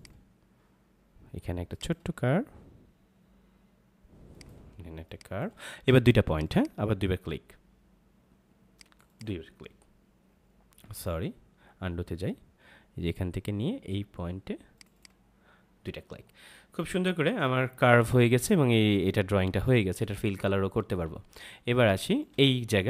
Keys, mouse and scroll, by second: 4.7 space, 5.0 click, 5.2 space, 6.2 click, 10.8 ctrl+z, 14.7 click, 17.2 ctrl+-, 21.1 ctrl+=, 21.7 space, 21.9 click, 22.3 space.